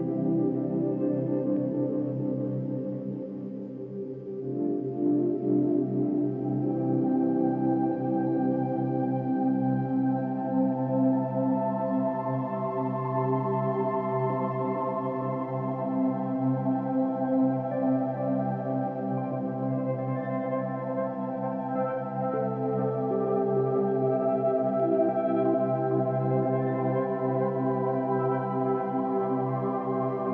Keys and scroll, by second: 0.7 space.